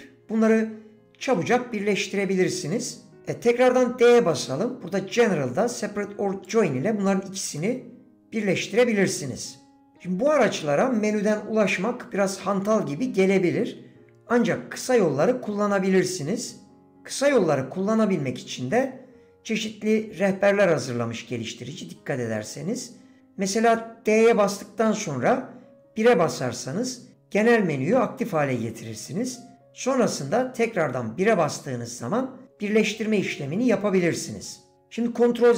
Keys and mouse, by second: 7.6-9.4 middle drag.